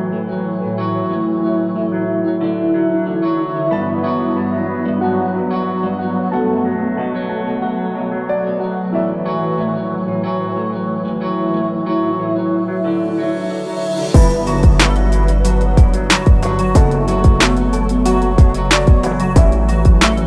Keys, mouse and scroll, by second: 6.4-7.3 alt+scroll down 2, 7.5-7.9 alt+scroll down 2, 7.9-8.8 scroll up 1, 8.8 click, 12.9 ctrl+c, 13.0-13.7 typing, 14.3 alt+shift+click, 16.6 click.